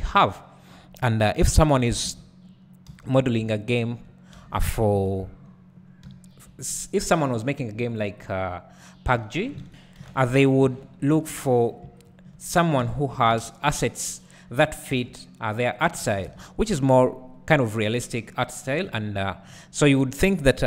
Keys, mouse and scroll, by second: 1.8 click, 2.1 alt+a, 2.9 3, 3.3 click, 3.7 shift+click, 4.4 f, 4.9 KP_Decimal, 5.7-6.1 scroll down 1, 6.7-8.0 scroll down 1, 8.0 shift+click, 9.2 f, 9.6 alt+a, 10.1 ctrl+z, 11.2 alt+a, 11.7 click, 12.1 shift+click, 12.8 f, 13.3 alt+a, 13.7 1, 14.2 click, 15.4 g, 16.0 click, 16.3 alt+a, 19.5-20.6 scroll down 2.